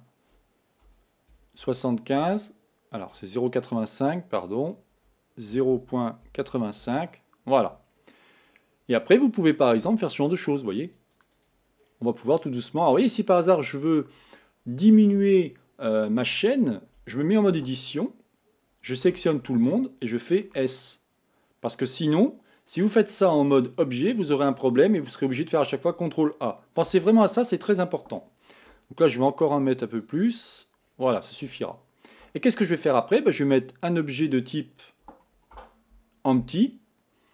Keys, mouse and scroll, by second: 4.6 click, 7.9-10.5 scroll down 4, 10.5-11.5 drag, 11.9-13.1 scroll down 7, 13.1-16.7 scroll up 6, 17.6 Tab, 19.1 a, 19.5 a, 20.7 s, 26.9 Tab, 28.2-29.8 shift+middle drag, 29.8 click, 30.9-31.5 scroll down 4, 31.5-34.5 shift+middle drag, 35.4 shift+a.